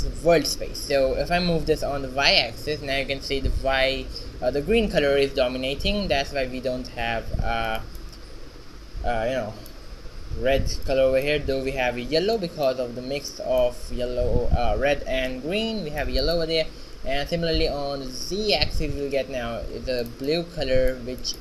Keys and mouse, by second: 1.8 g, 8.1 middle click, 16.4-18.2 right drag, 17.7 g, 20.4-21.4 middle drag.